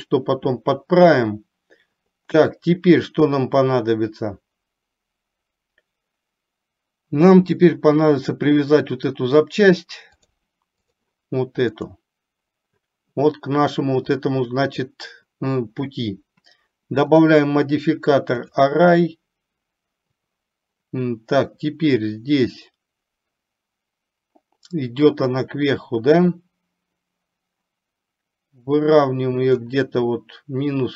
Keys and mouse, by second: 10.3-11.1 drag, 17.3-18.7 drag, 26.4-29.7 drag.